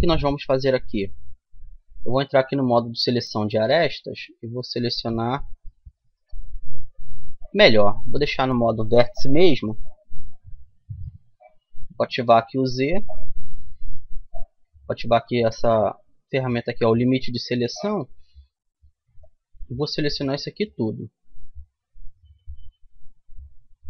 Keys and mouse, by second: 4.5 click, 4.5-8.7 right drag, 10.1-12.5 middle drag, 11.7 z, 13.3 z, 16.9-18.6 drag, 18.6 b.